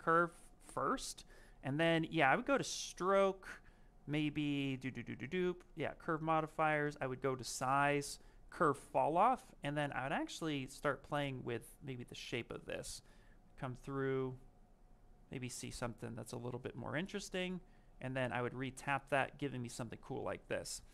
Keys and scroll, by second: 17.7 ctrl+z.